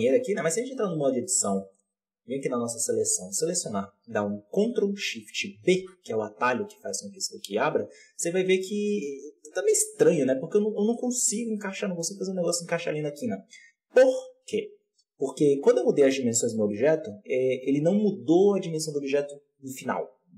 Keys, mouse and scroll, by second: 0.3 Tab, 0.7-5.3 drag, 5.3 ctrl+shift+b, 13.3 Tab.